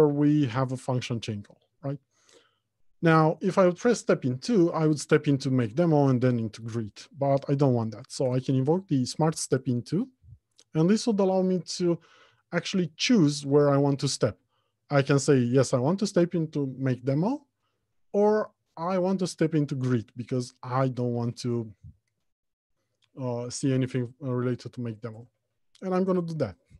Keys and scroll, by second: 8.5 shift+F7.